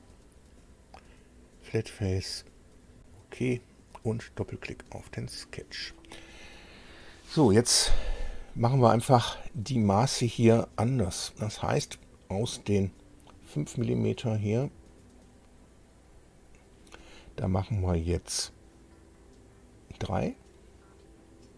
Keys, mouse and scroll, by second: 0.0 click, 2.3 click, 4.5 click, 8.2 scroll down 1, 9.5-10.1 scroll up 1, 10.1 scroll down 1, 10.8 scroll up 1, 12.8 scroll down 2, 14.2-15.3 drag, 16.1 click.